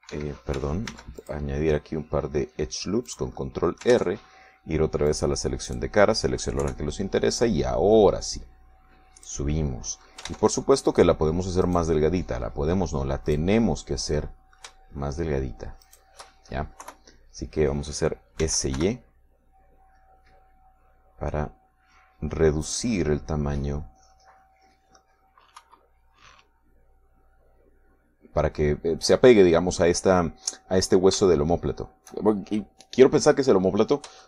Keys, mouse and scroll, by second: 0.5 ctrl+r, 1.2 Escape, 2.0 ctrl+r, 2.4 ctrl+click, 4.2 click, 4.6-6.2 middle drag, 5.2 ctrl+Tab, 6.2 click, 6.8 right click, 7.8 KP_3, 8.6-10.6 drag, 10.6 middle click, 11.4 ctrl+Tab, 12.0 click, 12.8 right click, 13.6 middle click, 14.4 right click, 14.8-17.0 middle drag, 17.0 shift+right click, 17.4-18.6 shift+middle drag, 18.0 KP_3, 19.6 s, 19.9 y, 23.8-26.3 drag, 26.8 KP_3, 32.4 shift+middle click.